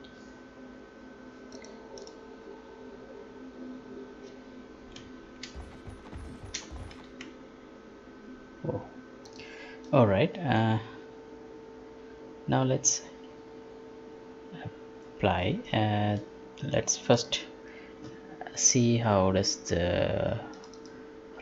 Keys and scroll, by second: 7.1 Escape.